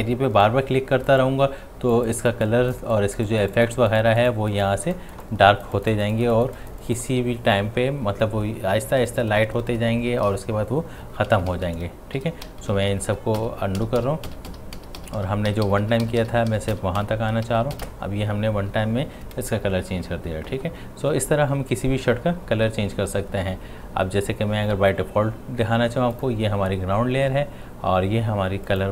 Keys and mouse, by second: 0.4-5.8 drag, 11.3-12.2 typing, 12.5 ctrl+z, 17.5 ctrl+shift+z, 26.1 click, 26.1 click, 28.7 click.